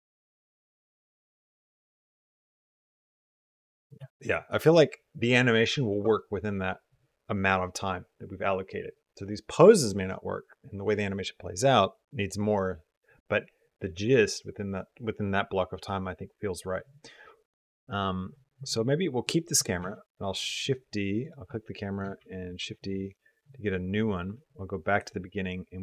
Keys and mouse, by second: 0.5 click, 2.4 click, 3.7 space, 19.1 click, 19.6 shift+d, 21.1 click, 22.1 shift+d, 24.4 click, 25.7 middle click.